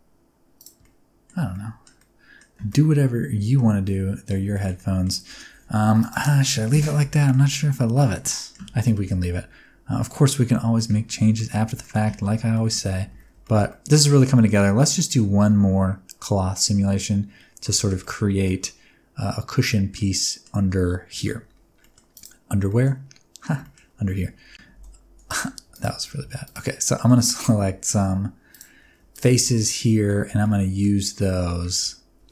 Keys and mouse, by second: 0.5 middle click, 0.8 middle click, 1.3 Tab, 1.4 middle click, 1.9-2.3 middle drag, 2.6 alt+a, 2.6-3.5 middle drag, 3.7 middle click, 4.4 shift+middle click, 4.7 middle click, 5.9 click, 6.3 middle click, 6.8 middle click, 7.9 middle click, 8.3 middle click, 8.6 alt+a, 8.9 shift+middle click, 9.1-9.9 middle drag, 10.7 middle click, 11.3 shift+middle click, 11.7 shift+middle click, 12.5 middle click, 13.0 alt+a, 13.3 shift+middle click, 13.6-14.0 middle drag, 14.3 shift+middle click, 17.7 shift+middle click, 17.9-18.4 middle drag, 19.8-20.3 middle drag, 21.7 middle click, 22.6 middle click, 23.5 shift+middle click, 24.1 Tab, 24.7 3, 25.3 click, 25.8 shift+click, 26.2 alt+z, 27.0 middle click, 27.3 alt+z, 29.4 alt+z, 29.6 middle click, 30.3 alt+z, 30.4 middle click, 31.3 middle click.